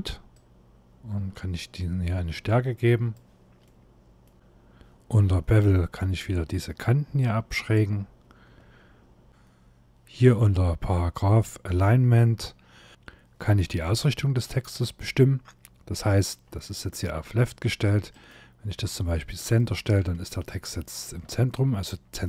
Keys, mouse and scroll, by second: 0.0 click, 3.3 middle click, 5.3-5.7 scroll up 4, 6.8 click, 10.3-10.7 scroll down 1, 10.8-11.9 scroll down 1, 13.2 scroll down 2, 13.7 shift+middle click, 14.4 middle click, 17.8 click, 19.8 scroll down 3, 20.3 shift+middle click, 21.1 middle click.